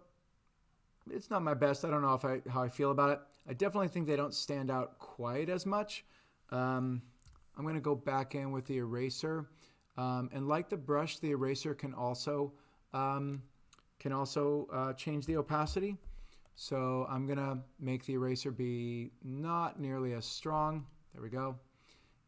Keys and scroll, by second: 7.3 e, 15.3 6, 15.7 Return.